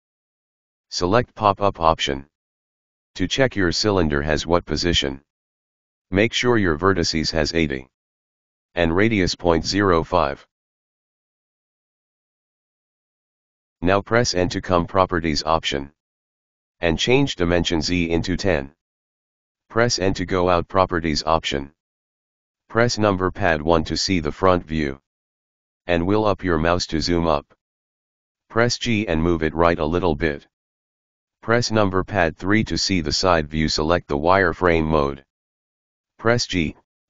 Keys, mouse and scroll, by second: 2.8-5.8 drag, 11.7-13.7 drag, 13.7 n, 15.4-18.5 drag, 20.1 n, 22.4 KP_1, 23.6 scroll up 2, 27.6 g, 31.2 KP_3, 35.7 click.